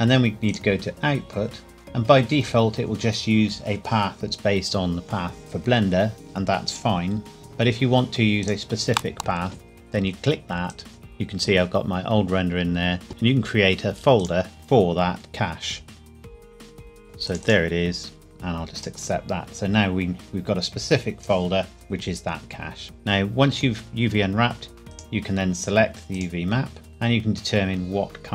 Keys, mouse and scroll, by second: 0.5 click, 1.0-2.5 scroll down 1, 8.4 click, 16.2-17.1 typing, 16.9 click, 24.9 click.